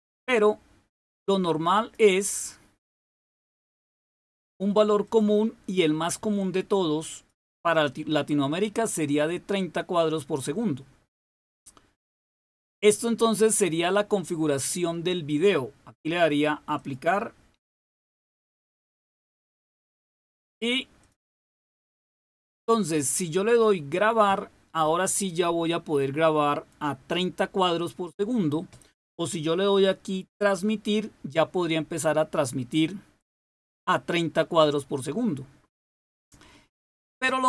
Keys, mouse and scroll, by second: 1.7 click, 3.8 click, 5.0 click, 7.1 click, 16.6 click, 20.9 click.